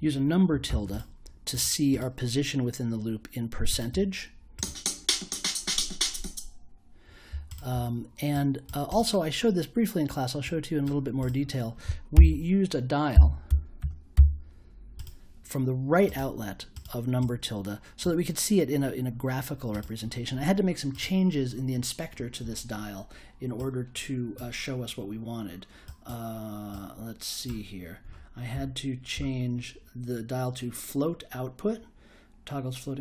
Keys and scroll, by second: 0.0-0.6 typing, 12.1-14.6 typing.